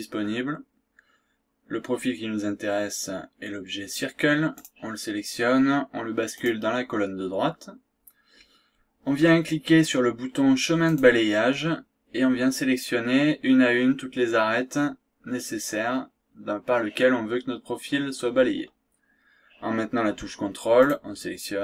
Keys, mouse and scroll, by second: 4.6 click, 6.4 click, 10.9 click, 20.8 ctrl+click.